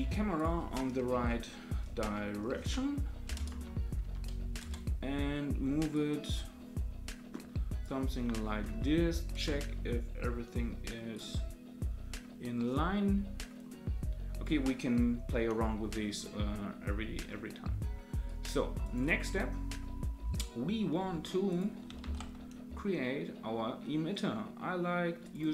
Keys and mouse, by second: 0.5-5.4 drag, 5.9-7.8 drag, 9.3 KP_0, 11.1-14.5 drag, 17.3-18.2 middle drag, 18.2-18.9 right drag, 21.5 click, 22.0 shift+a.